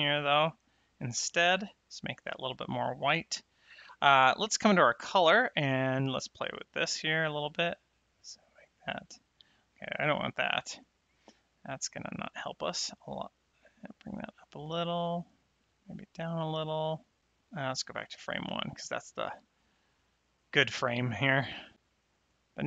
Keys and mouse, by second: 4.8 click, 6.9 click, 10.6 click, 10.6 right click, 11.9 click, 18.0 shift+Left, 21.8 click.